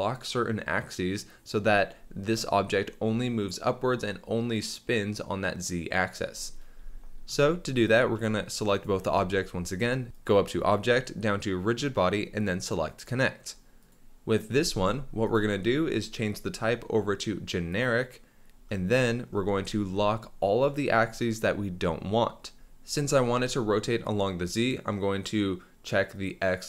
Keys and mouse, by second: 7.8 click, 8.7 shift+click, 10.2-13.0 drag, 13.8 click, 14.5 g, 14.6 x, 15.3 click, 16.5-17.8 drag, 26.1 click.